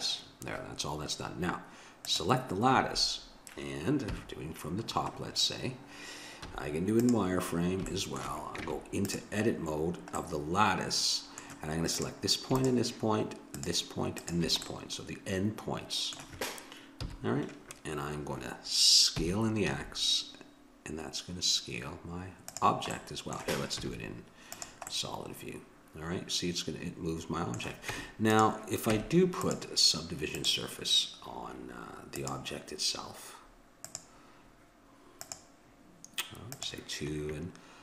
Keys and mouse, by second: 2.1-3.9 drag, 4.1 KP_7, 6.4 z, 8.6 Tab, 11.9-16.0 drag, 17.0 KP_7, 19.2 s, 23.0-26.7 middle drag, 23.8 z, 27.9 Tab, 28.3-35.7 drag, 28.9 Tab, 36.5-37.8 drag.